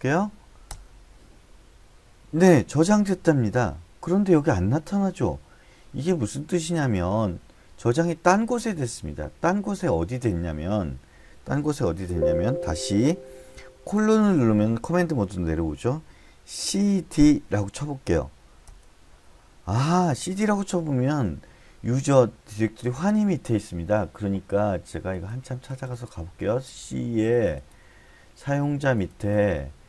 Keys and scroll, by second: 0.0-0.3 typing, 0.7 Return, 11.9 Escape, 13.9 typing, 16.6-17.1 typing, 18.7 Return.